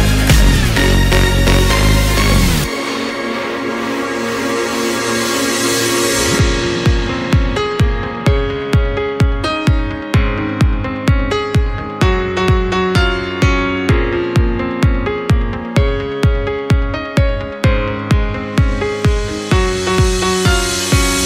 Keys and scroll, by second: 10.0 BackSpace.